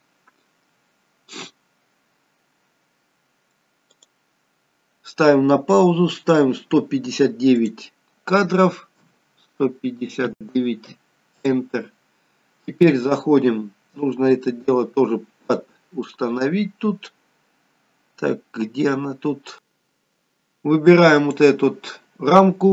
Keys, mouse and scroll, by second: 4.0 click, 7.6 click, 16.0-18.0 scroll down 9, 21.2 click.